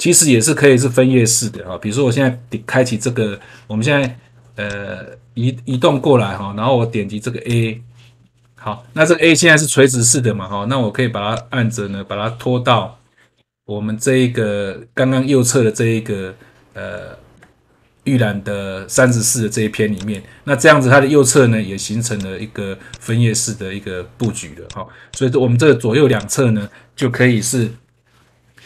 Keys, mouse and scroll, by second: 3.9 click, 4.6 click, 7.4 ctrl+click, 11.3 click, 18.9 click, 19.9 click, 22.1 click, 22.9 click, 24.1 click, 24.6 click, 25.0 click, 26.1 click.